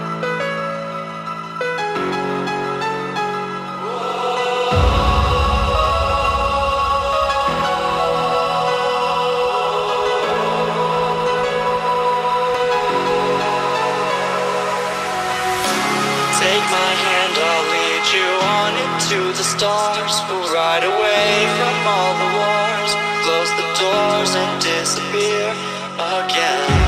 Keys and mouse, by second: 0.2 click, 2.3 ctrl+-, 2.7 space, 2.9 click, 3.0 space, 3.8-7.2 alt+drag, 7.4 click, 8.8-10.0 alt+drag, 10.5 Left, 10.9 ctrl+=, 11.8 space, 12.0 click, 12.1 space, 12.7 ctrl+-, 13.1 space, 14.3 click, 14.9 ctrl+=, 15.3 space, 15.6 click, 15.6 space, 15.8 click, 16.1 space, 16.5 ctrl+=, 17.1 Right, 17.8 Down, 18.5 click, 18.8 Left, 19.3 Down, 20.0 click, 20.2 space, 20.4 click, 21.0 Up, 21.4 Left, 22.0 click, 22.3 Right, 22.8 Up, 23.5 click, 23.9 ctrl+-, 24.7 space, 24.9 click, 25.3 click, 25.5 space, 25.7 click, 25.9 space, 26.7 ctrl+=.